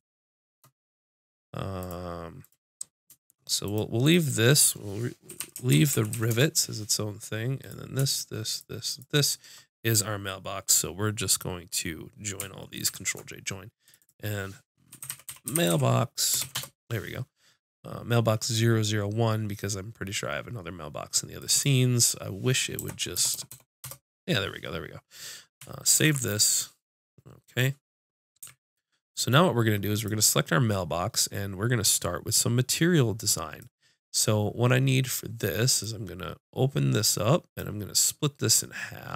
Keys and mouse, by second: 7.6-12.8 drag, 12.8 ctrl+j, 13.8-16.0 drag, 21.4-23.3 drag, 23.3 BackSpace, 23.5 BackSpace, 25.9 ctrl+s, 28.4 a, 29.9-33.7 drag, 35.8 right click, 36.0 click.